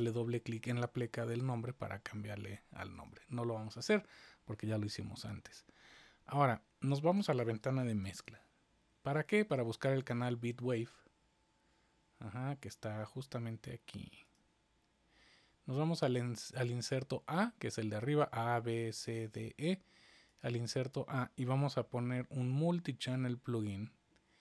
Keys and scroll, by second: 8.0 super+=.